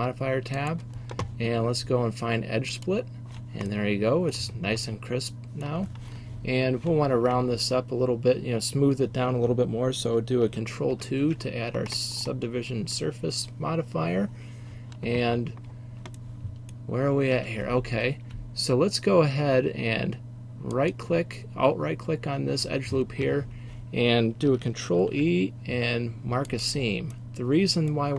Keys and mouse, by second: 3.8 middle drag, 5.1-9.0 middle drag, 11.0 ctrl+2, 15.7-16.5 middle drag, 16.5 middle click, 17.4 Tab, 20.8-25.1 drag, 25.1 ctrl+e, 27.3 middle click, 27.8 middle click.